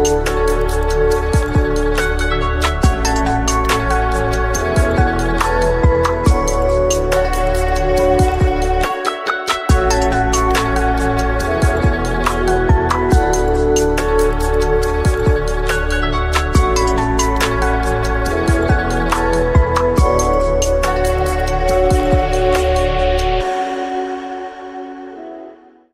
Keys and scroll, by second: 0.6 F2, 6.7 Tab, 10.4 8.